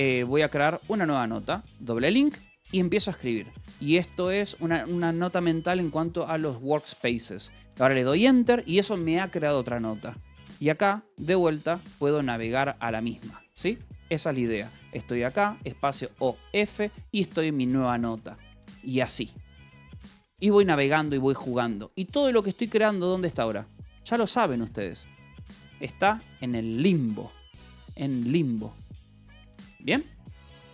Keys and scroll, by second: 0.0-0.8 typing, 3.6-4.6 typing, 5.7-7.1 typing, 8.1 Return, 10.7 h, 11.5 Escape, 11.8 a, 12.0 BackSpace, 12.6 Escape, 13.1 a, 13.5 ], 13.7 Escape, 14.0 h, 15.6 space, 15.8 o, 16.2 f, 17.3-18.6 typing, 24.6 :, 25.6 k, 27.2 j, 27.5 k, 28.3 Return, 29.3-30.7 typing.